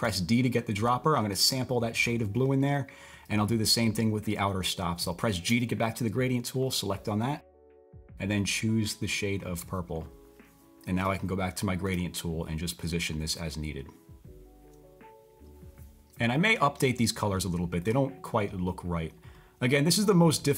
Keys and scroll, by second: 0.0 typing, 5.5 typing, 7.6 typing, 11.8 typing.